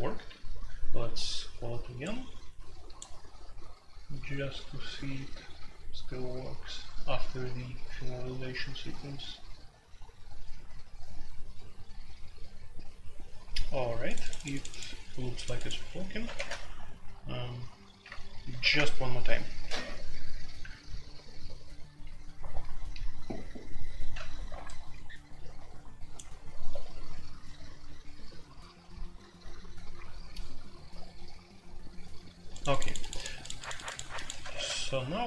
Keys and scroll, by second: 16.3 shift+super+c, 18.5 alt+p, 18.7 Return, 34.5 super+c.